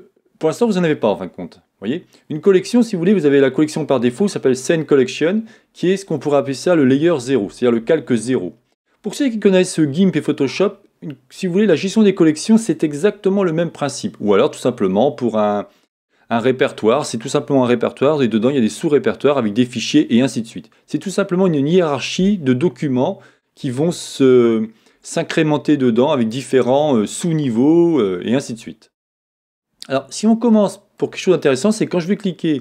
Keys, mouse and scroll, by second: 30.5 middle click.